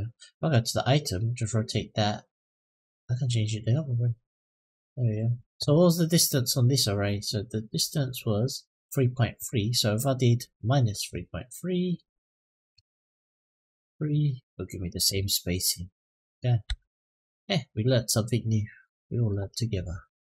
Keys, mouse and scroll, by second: 1.0 click, 2.3-5.0 drag, 5.9 click, 7.7 click, 10.2 click, 11.7-13.8 drag, 15.5 middle click, 16.4 Tab, 16.7 click, 17.1-19.1 middle drag, 19.4-19.7 scroll down 3, 20.1-20.3 middle drag.